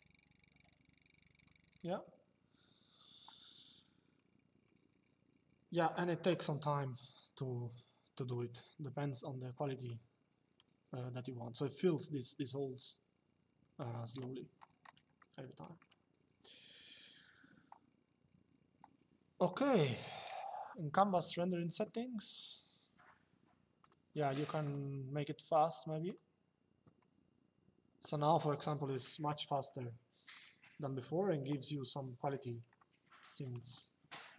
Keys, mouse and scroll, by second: 9.5 click, 14.9 shift+middle click, 20.3 click, 23.5 click, 25.8 click, 29.4 shift+middle click, 32.5 shift+middle click.